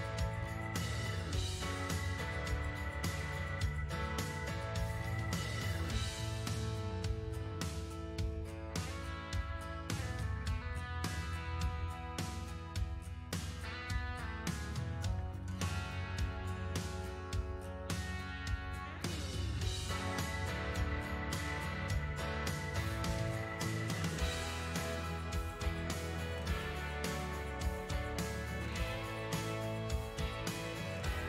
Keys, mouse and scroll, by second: 5.3-8.3 drag, 9.2-11.1 middle drag, 11.1-13.5 drag, 13.5-14.8 middle drag, 14.8-19.8 drag, 19.8-25.5 ctrl+middle drag, 25.5-26.9 drag, 26.9-28.4 middle drag, 28.4-30.3 drag, 30.3-31.2 middle drag.